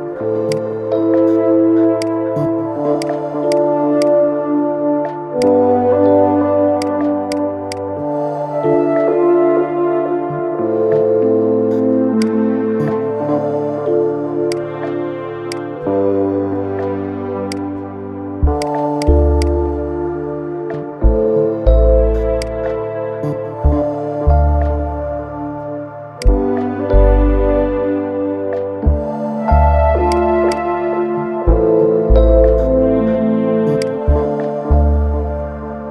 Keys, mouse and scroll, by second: 0.2 click, 1.2 scroll down 1, 1.8 click, 2.7-3.8 drag, 5.1 click, 6.5-7.5 drag, 8.1 scroll down 4, 8.7-9.2 shift+middle drag, 9.2 scroll up 2, 10.0-11.9 middle drag, 11.9 click, 14.2-16.0 drag, 16.0-17.2 middle drag, 17.2 click, 18.3-19.1 drag, 19.5 scroll up 2, 20.8 scroll down 1, 21.3-22.1 middle drag, 22.1 click, 22.5 scroll up 2, 23.2-25.9 middle drag, 25.9 click, 27.2 scroll down 1, 28.4 g, 30.3 click, 31.3-31.7 scroll up 1, 32.5 KP_3, 33.0 scroll up 2, 33.5 click.